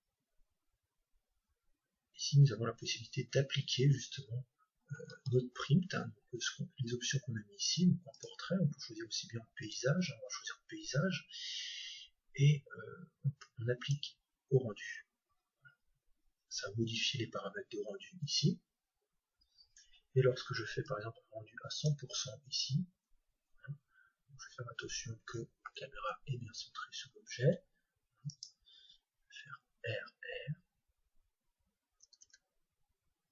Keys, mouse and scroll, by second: 4.8-6.0 scroll up 1, 6.0-7.5 scroll up 1, 7.5 scroll up 1, 8.1-10.0 drag, 13.5-15.2 drag, 14.9-16.0 scroll up 1, 16.0-17.5 scroll up 1, 17.5-19.7 scroll up 1, 19.7-21.0 scroll up 1, 21.0-22.7 drag, 28.3-30.4 ctrl+alt+right drag.